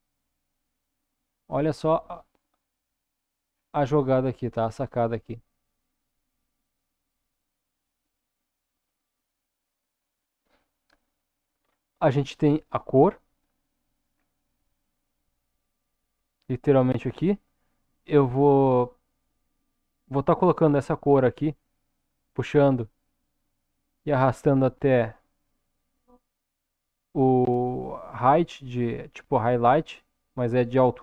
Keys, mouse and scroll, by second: 1.8 click, 3.0-4.9 scroll down 4, 5.2-6.4 drag, 7.9-9.1 drag, 11.6-13.2 scroll up 2, 21.9-31.0 drag.